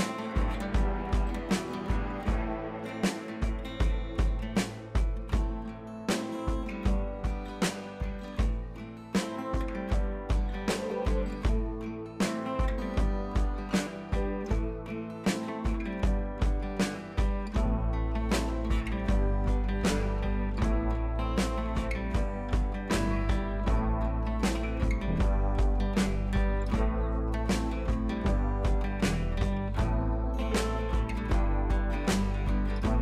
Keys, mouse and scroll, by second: 0.2 scroll down 1, 0.8 ctrl+z, 2.0-4.3 drag, 4.5 scroll up 1, 5.1 ctrl+t, 5.6 right click, 6.4-8.1 drag, 8.8 alt+click, 9.9 ctrl+j, 10.6 ctrl+z, 11.2 ctrl+j, 11.5 click, 13.8 click, 17.0 ctrl+j, 18.4 click, 20.6-25.5 drag, 27.1-29.8 drag, 30.4 scroll down 1, 31.4 click, 31.5 scroll down 1, 31.7 scroll up 1.